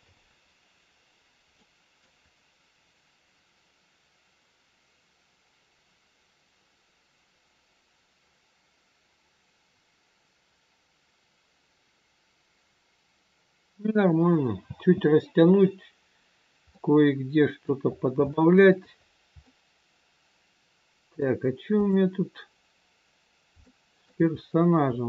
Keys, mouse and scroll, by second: 0.7 scroll up 1, 1.5 middle click, 2.4 scroll down 1, 4.6 scroll down 2, 14.6 space, 15.6 scroll up 2, 16.7 middle click, 16.7-17.6 scroll up 3, 17.8-18.1 scroll up 2, 18.3 shift+middle click, 18.9-19.4 scroll up 1, 19.4 middle click, 21.7 click, 23.4 scroll up 1, 23.6 shift+middle click, 24.4-24.7 scroll up 2.